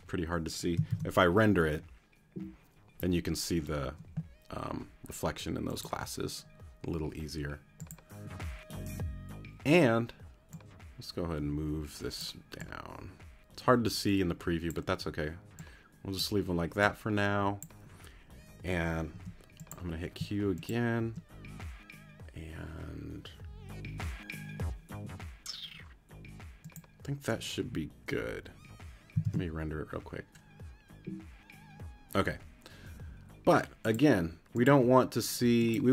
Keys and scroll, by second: 0.9 super+r, 19.1 q, 29.2 super+r.